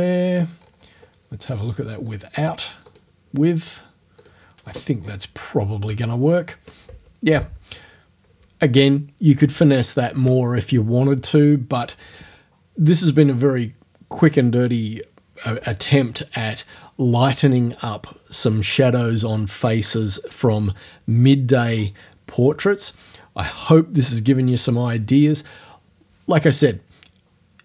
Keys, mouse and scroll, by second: 0.6-1.1 scroll up 1, 2.1 click, 2.9 click, 4.2 click, 4.5 middle click, 4.6-5.3 scroll down 2, 4.9 middle click.